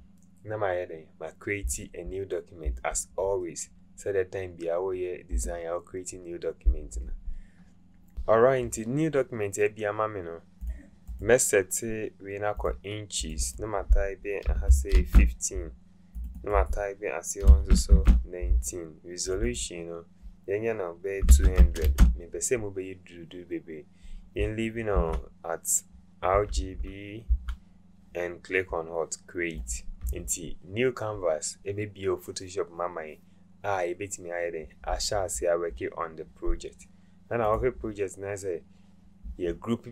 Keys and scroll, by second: 14.7 KP_1, 14.9 KP_5, 17.5 KP_1, 17.9 KP_9, 21.3 KP_2, 21.7 KP_0, 21.8 KP_0, 24.9 Tab.